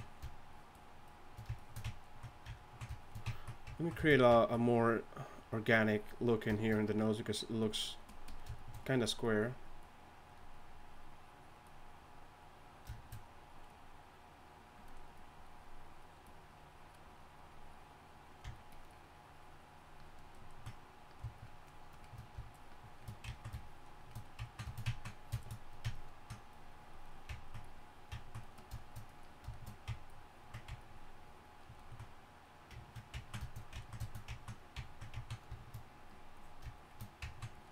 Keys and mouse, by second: 20.3-25.4 drag, 25.9-32.6 drag, 36.1-37.7 drag.